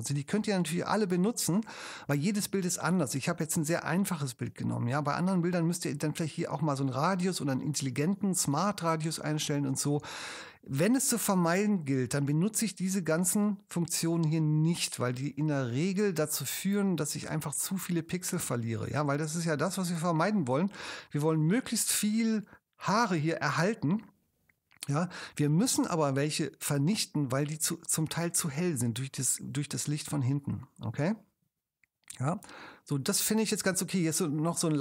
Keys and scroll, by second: 19.9 super+space, 27.7 space.